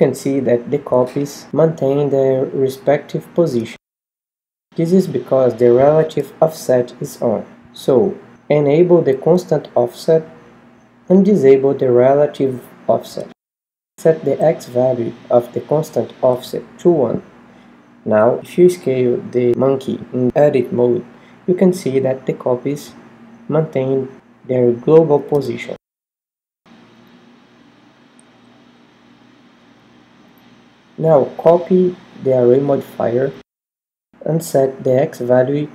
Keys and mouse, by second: 19.0 s, 19.2 click, 22.2-23.7 drag, 23.7 Tab, 23.8 click, 33.3-35.2 drag.